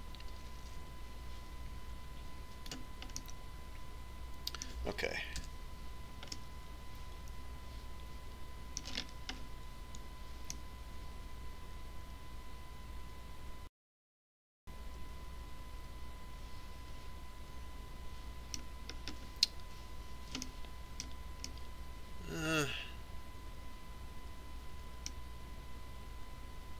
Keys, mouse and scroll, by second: 0.2 ctrl+r, 5.1-7.0 middle drag, 7.4 Tab, 8.3-9.9 middle drag, 10.8-14.2 middle drag, 20.0-24.4 middle drag.